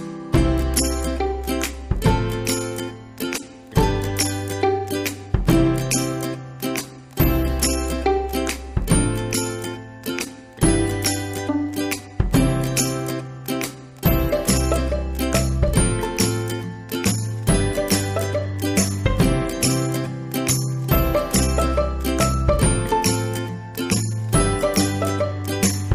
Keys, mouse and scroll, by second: 1.8 click, 7.5 click, 10.9 click, 15.7-25.5 drag.